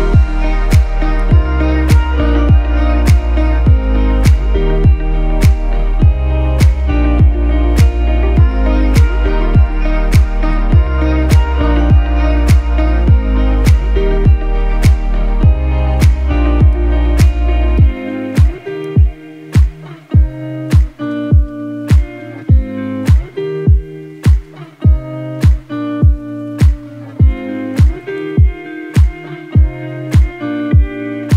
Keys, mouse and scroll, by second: 1.4-6.1 alt+shift+drag, 12.5 right click, 14.0 click, 15.9 click, 18.9 shift+k, 19.5 shift+e, 21.0-24.6 typing, 25.3 ctrl+a, 27.3 click, 28.1 click, 29.3-31.3 drag.